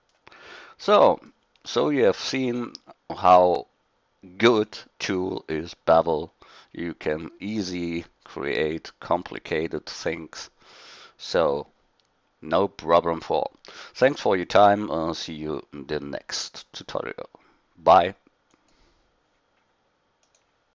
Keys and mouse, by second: 19.4-20.5 drag.